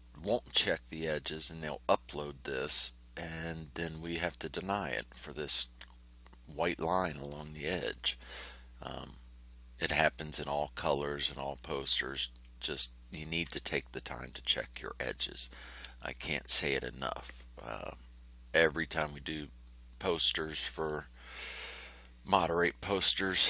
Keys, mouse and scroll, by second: 12.4 ctrl+scroll up 2, 13.7 ctrl+click, 14.7 click, 18.0 ctrl+scroll down 2, 19.8 middle click, 20.8 click.